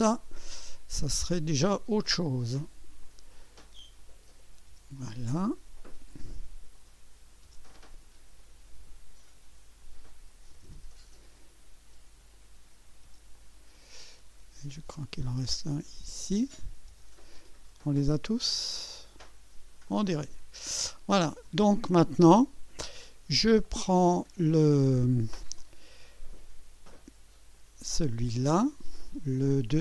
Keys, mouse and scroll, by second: 1.1 click, 2.0 Return, 3.0 click, 4.0 click, 4.7 Return, 4.9 Return, 5.0-5.6 drag, 5.8 click, 6.7 click, 7.4 Return, 8.3 click, 9.8 click, 10.5 Return, 11.2 click, 12.3 click, 13.0 Return, 13.3-14.4 drag, 14.7 click, 16.1 click, 16.9 Return, 17.3-19.8 drag, 19.9 click, 21.7 scroll up 2, 27.5 click, 28.0 space.